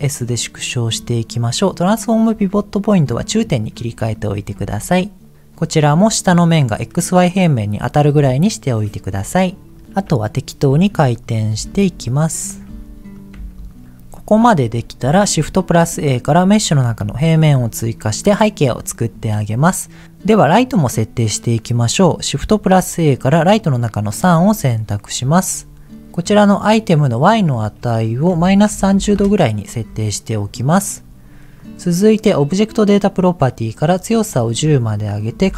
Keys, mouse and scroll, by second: 0.8 click, 2.3-3.5 drag, 4.1 shift+click, 4.5 s, 5.3 click, 6.7-8.1 middle drag, 8.1-9.2 scroll up 1, 9.2-9.7 scroll down 3, 9.7 middle click, 10.1 KP_7, 10.7 r, 11.2 click, 11.5 g, 11.7 click, 12.0 click, 12.6 r, 13.1 click, 13.3 g, 13.9 middle click, 14.9 shift+a, 17.8-18.3 scroll down 2, 18.3-19.4 middle drag, 22.3 shift+a, 27.4-29.2 drag, 31.5 click, 33.5 click, 34.5-35.5 drag.